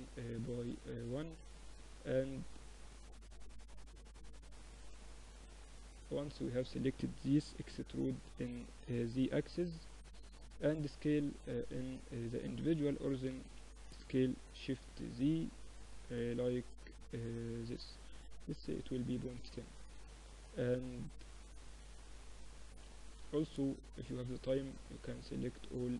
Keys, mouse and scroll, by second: 6.5 e, 10.6-12.5 drag, 12.1 s, 19.8 Tab, 20.5-21.7 middle drag, 21.8 Tab, 23.8-25.9 drag.